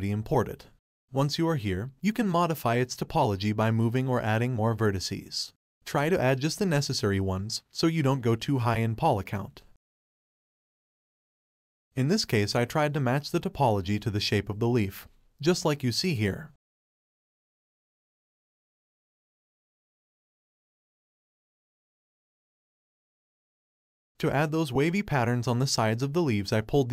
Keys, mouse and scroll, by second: 0.0 click, 0.5 click, 0.7 middle click, 1.1 KP_1, 1.4-1.8 scroll up 1, 1.8 Tab, 1.9 1, 2.0 click, 2.3 k, 3.4 2, 3.5 click, 3.9 x, 4.5 1, 4.9 ctrl+r, 5.3 ctrl+r, 5.7 ctrl+r, 6.1 1, 6.7 click, 7.0 g, 8.1 click, 8.2 g, 9.0 click, 9.2 g, 10.6 click, 10.6 g, 11.2 click, 11.3 g, 12.0 click, 12.2-13.7 shift+middle drag, 13.7 Tab, 14.0 click, 14.1 click, 14.4 middle click, 14.7 click, 14.9-15.7 scroll down 1, 15.7 KP_1, 15.8 click, 16.2-17.2 scroll up 1, 17.2 click, 17.7 click, 20.4-22.4 drag, 22.6 click, 24.1 Tab, 24.2 click, 24.8 click, 25.1 middle drag, 25.3-26.8 scroll down 2.